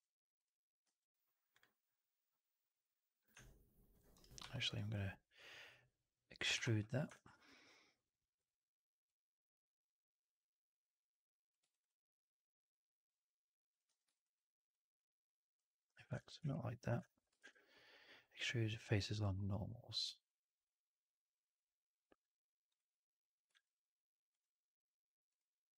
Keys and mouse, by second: 0.7 q, 4.4 3, 4.6 click, 6.4 ctrl+e, 7.0 typing, 7.2-8.4 alt+drag, 9.0-11.4 drag, 11.6 alt+right click, 11.8-13.6 alt+drag, 13.8 w, 16.1 ctrl+z, 16.3 ctrl+z, 17.3 shift+Tab.